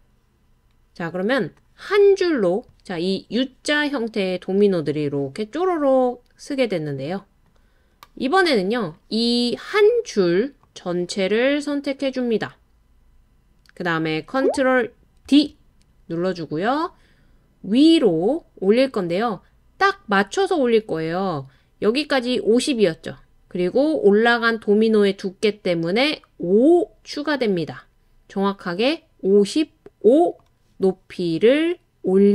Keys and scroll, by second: 15.2 super+d.